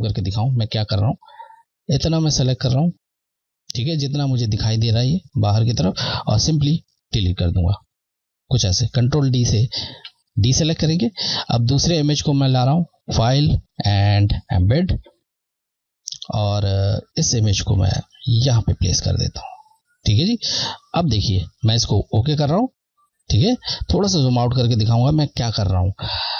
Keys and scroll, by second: 0.3 scroll, 0.9 scroll, 2.1 Left, 7.4 Delete, 10.2 ctrl+d, 11.8 Left, 17.5 Left, 22.5 Left, 23.9 scroll.